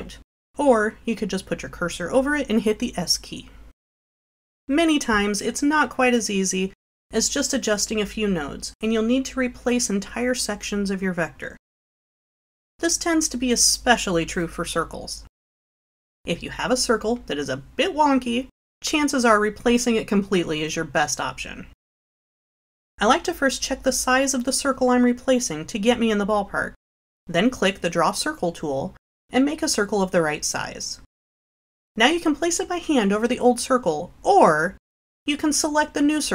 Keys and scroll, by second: 29.0 4.